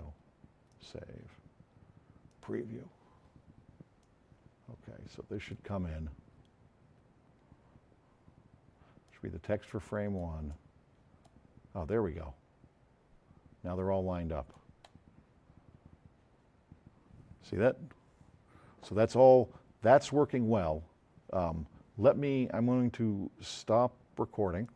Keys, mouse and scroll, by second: 0.6 click, 4.0 click, 9.0-10.3 drag, 11.9-12.2 drag, 14.8-17.5 drag.